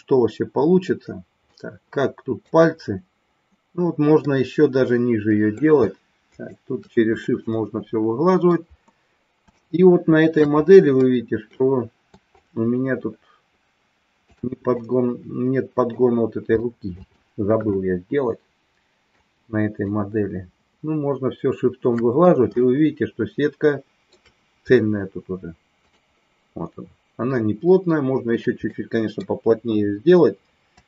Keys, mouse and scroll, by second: 0.3 ctrl+r, 1.5 middle click, 4.3-5.5 middle drag, 6.3 shift+click, 7.3-8.5 middle drag, 9.5 shift+middle click, 11.0 middle click, 12.3-14.4 shift+drag, 14.8-15.9 middle drag, 16.6 shift+middle click, 17.8-19.1 middle drag, 19.8-21.9 shift+drag, 22.6-24.1 shift+middle drag, 25.9 click, 28.6 middle click, 29.4 KP_1.